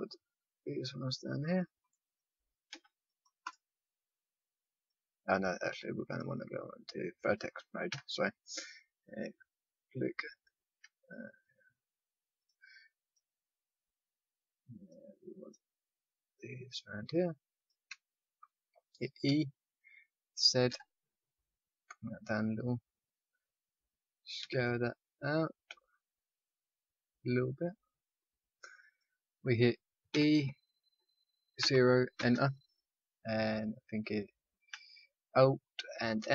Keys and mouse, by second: 2.1-4.7 middle drag, 2.6 c, 6.1 click, 7.9 a, 8.9-20.6 drag, 19.2 e, 24.3 s, 30.1 e, 36.1 alt+m.